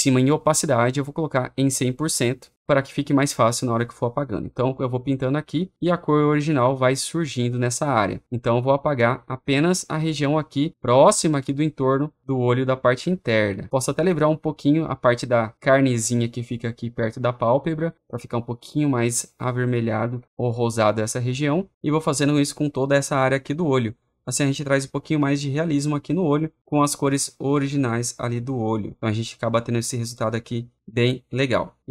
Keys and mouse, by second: 1.6 click, 8.2-9.3 drag, 9.9 click, 15.0 click, 17.9-19.1 drag, 20.0 click, 22.2-25.6 drag, 30.6 click.